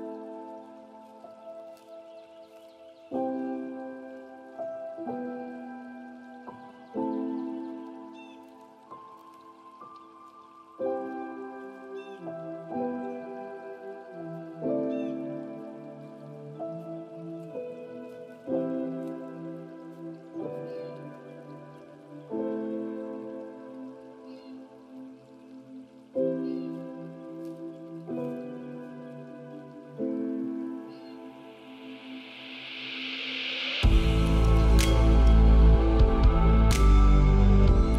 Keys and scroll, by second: 22.0 ctrl+z, 28.4 ctrl+a, 37.8 ctrl+z.